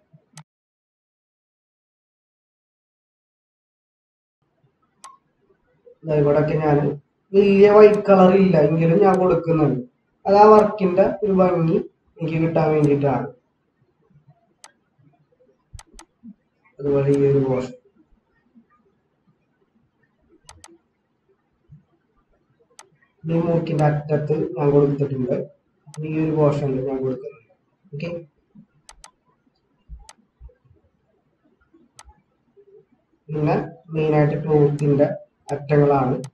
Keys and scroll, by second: 4.3 ctrl+-, 9.7 ctrl+-, 13.2 ctrl+-.